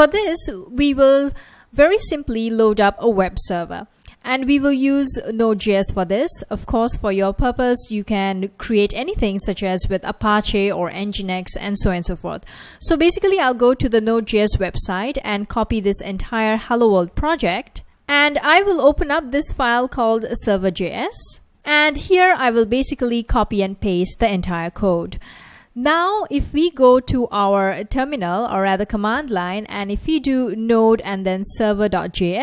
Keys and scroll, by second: 14.1 F1, 17.7-20.6 typing, 26.0 super+Tab, 29.6-32.4 typing.